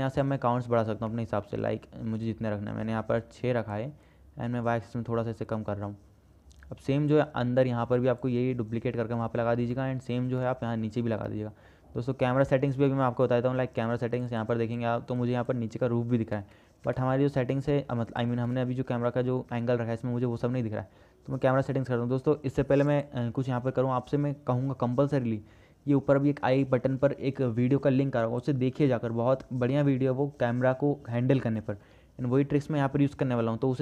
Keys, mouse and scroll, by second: 0.0 middle click, 1.3 shift+click, 1.3-1.7 shift+middle drag, 2.4 click, 3.5 click, 4.3-7.4 drag, 10.0 click, 10.0 right click, 10.3 shift+middle click, 10.6-11.1 middle drag, 11.5 middle click, 13.1-13.5 middle drag, 18.7 KP_0, 19.9 shift+middle click, 27.7 click.